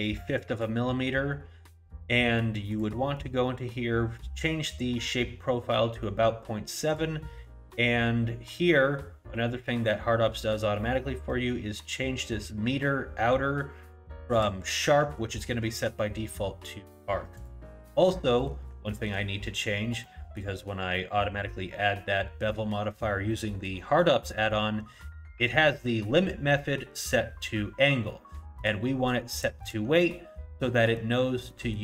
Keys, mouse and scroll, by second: 2.7 click, 6.9 click, 14.4 click, 17.9 middle click, 18.4 middle click, 18.9 shift+middle click, 19.3 scroll up 2, 20.0 middle click, 23.3 middle click, 28.6 click, 30.7 middle click, 31.5 middle click.